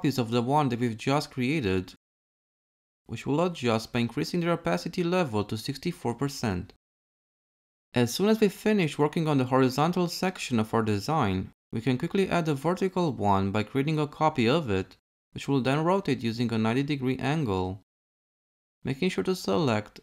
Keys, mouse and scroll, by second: 13.8 ctrl+c, 15.9 r.